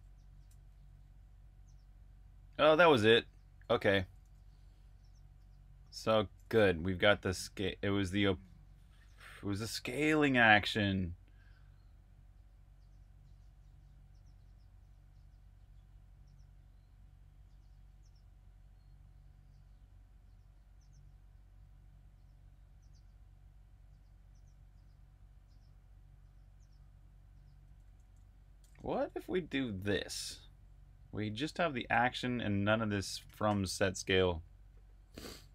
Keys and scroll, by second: 0.6 typing, 2.2-4.2 typing, 5.2-6.3 typing, 6.6 super+q, 7.8 j, 14.6 typing, 16.9 typing, 27.5-29.5 typing, 32.0 Escape, 32.2-33.6 typing.